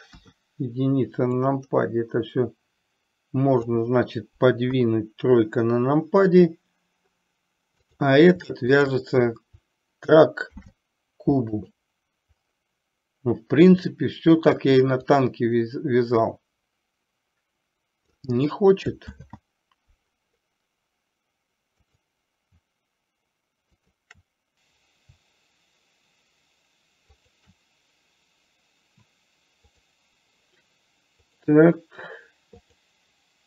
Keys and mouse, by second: 0.2 KP_1, 1.4 click, 1.7-3.8 drag, 4.7 KP_3, 10.6 ctrl+p, 15.2-18.3 drag, 19.2 ctrl+z, 23.8 shift+click, 24.6 ctrl+z, 27.4 shift+click, 31.4 click.